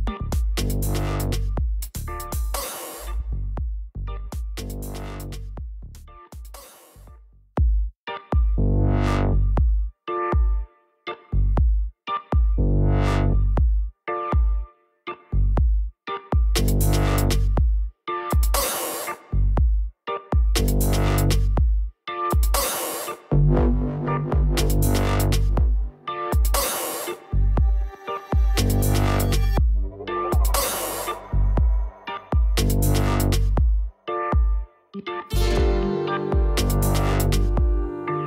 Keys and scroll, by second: 0.9-2.7 typing, 3.4 Return, 19.7 h, 26.1 f, 27.6 i, 27.9 r, 29.0-30.9 typing, 32.1-35.1 typing, 36.3 Return, 37.0 e, 37.7 n, 37.9 a.